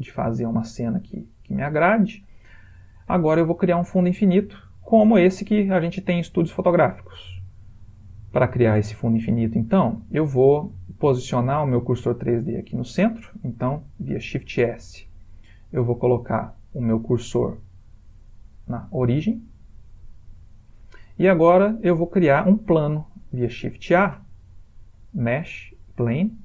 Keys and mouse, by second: 4.7 ctrl+middle click, 5.4 middle click, 9.3 ctrl+middle click, 14.7 shift+s, 23.8 shift+a.